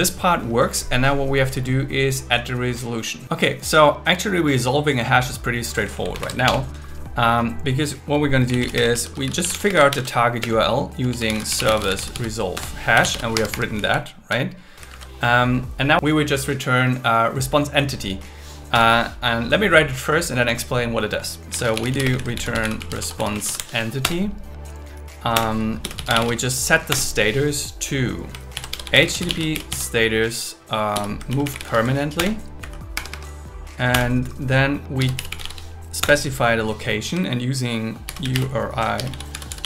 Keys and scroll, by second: 6.1 shift+super+Left, 6.4 BackSpace, 8.7 space, 9.7 space, 9.9 shift+0, 10.4 space, 12.5 Return, 13.3 Escape, 13.8 Left, 14.9 super+Right, 18.7 Return, 22.0 space, 23.2 shift+e, 24.0 Return, 25.3 Return, 26.9 Return, 28.5 shift+h, 29.1 shift+s, 31.0-32.1 typing, 32.2 Return, 32.6 Right, 32.9 Escape, 33.9 Return, 36.0 Return, 37.8-39.4 typing.